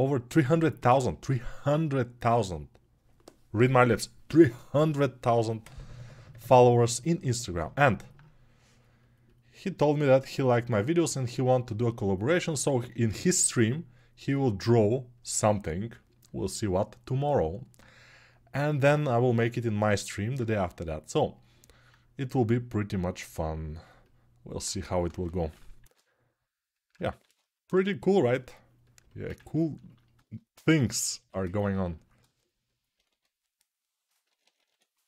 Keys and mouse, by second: 11.3-20.1 ctrl+alt+drag, 20.1-24.7 right drag, 24.7-35.0 shift+drag, 25.7 shift+r, 27.3 ctrl+r, 32.8 1.